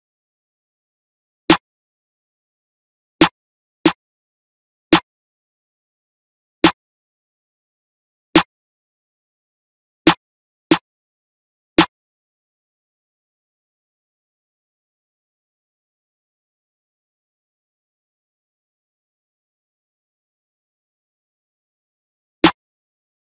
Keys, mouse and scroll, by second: 15.7 click, 16.6 click, 17.5 F1, 17.7 space, 18.0 click.